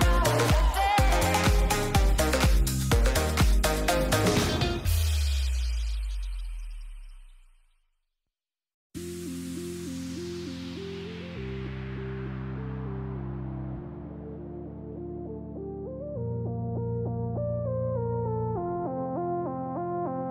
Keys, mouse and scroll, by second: 2.6 ctrl+click, 3.2 shift+middle click, 5.0 shift+middle click, 5.8 middle click, 7.2 right click, 7.9 shift+middle click, 8.8 shift+middle click, 9.5 click, 12.0 shift+middle click, 12.5 shift+click, 13.1 shift+click, 13.4 shift+click, 13.7 shift+click, 14.2 shift+click, 14.5 shift+click, 15.1 shift+click, 15.5 shift+click, 15.8 shift+click, 18.9 shift+middle click.